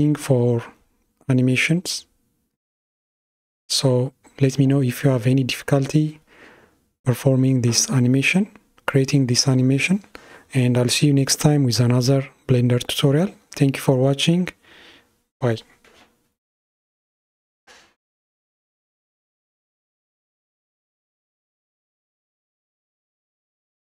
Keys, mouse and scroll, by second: 2.8-4.0 middle drag, 4.0-5.1 scroll down 3, 5.1-8.2 middle drag, 12.5-13.2 scroll up 3.